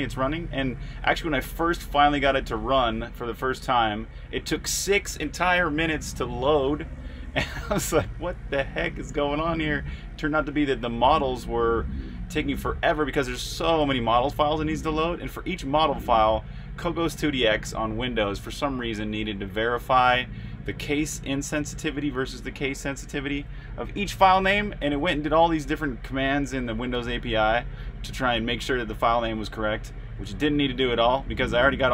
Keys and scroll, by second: 0.4-1.4 typing, 2.8-3.6 typing, 9.1-15.6 typing, 17.2-17.9 typing, 24.8-31.9 typing.